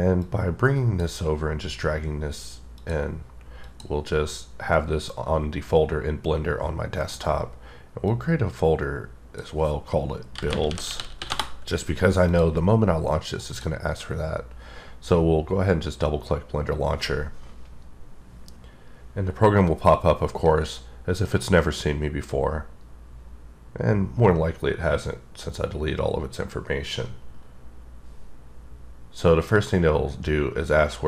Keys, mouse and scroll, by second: 0.2 click, 2.8 click, 3.7 click, 8.1 click, 10.4-11.2 typing, 11.4 Return, 12.3 click, 13.3 click, 13.5 double click.